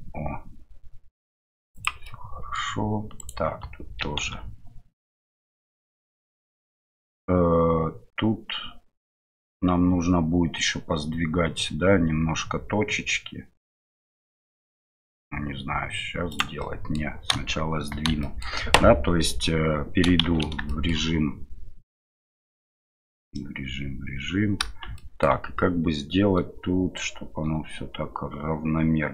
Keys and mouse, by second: 2.2 middle click, 3.2 alt+right click, 4.0 e, 16.7 middle click, 18.3 shift+middle click, 20.8 shift+middle click, 25.0 shift+click.